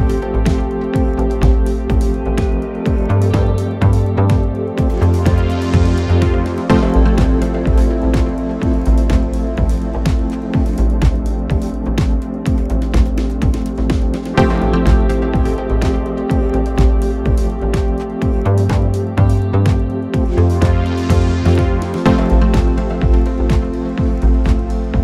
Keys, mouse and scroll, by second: 0.1 click, 0.2-0.6 scroll up 6, 0.2 middle click, 0.6 middle click, 0.8 click, 1.1 Tab, 1.4 click, 1.6 middle drag, 1.8-2.2 scroll up 3, 2.2 scroll down 2, 2.4-3.6 middle drag, 4.2 KP_5, 4.5 middle click, 4.7 scroll up 3, 4.7-5.4 middle drag, 5.4 KP_5, 5.7-6.7 middle drag, 7.3 scroll up 1, 7.4-8.4 scroll down 2, 9.0-10.0 middle drag, 10.4 Tab, 10.9 middle click, 11.1 Tab, 11.5 click, 11.6-12.1 middle drag, 12.1 click, 12.3 middle click, 12.9-13.6 drag, 13.6-14.4 middle drag, 14.4 Delete, 14.6 middle click, 14.8 click, 14.9-15.4 scroll down 1, 15.4 Tab, 15.7-16.0 drag, 16.0 middle click, 16.2 scroll up 3, 16.3 drag, 16.4 middle click, 17.3 scroll up 1, 17.4 middle click, 17.5 click, 17.6 scroll down 1, 17.8-18.8 drag.